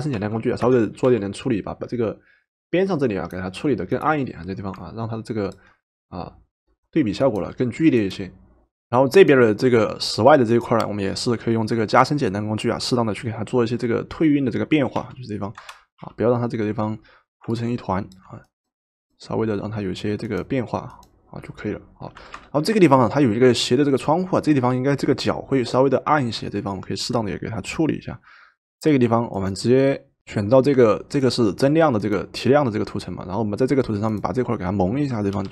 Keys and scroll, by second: 0.1 o, 1.1 o, 15.0 o, 16.0 o, 22.2 v, 35.3 i.